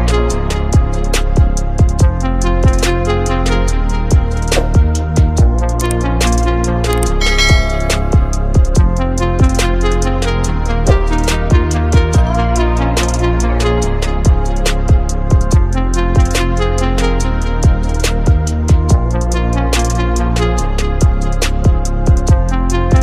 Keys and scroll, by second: 8.1 ctrl+space, 8.6 ctrl+space, 9.0 ctrl+space, 9.6 space, 10.3 ctrl+space, 15.8 ctrl+z, 16.3 ctrl+z, 17.2 F9, 17.4 ctrl+z, 17.9 ctrl+space, 18.7-20.5 typing, 20.9 ctrl+z, 21.6-23.0 typing.